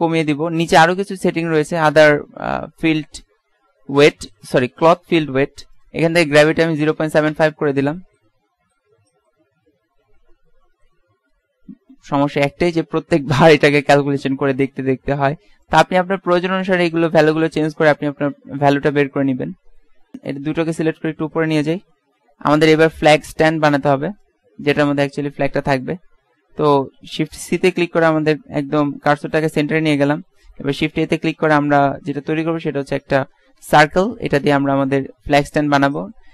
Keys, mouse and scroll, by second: 15.7 click, 19.7 Escape, 21.7 click, 24.4 click, 25.8 click, 27.7 shift+c, 29.6 KP_Decimal, 31.1 shift+a, 34.4-35.5 drag, 36.2 Tab.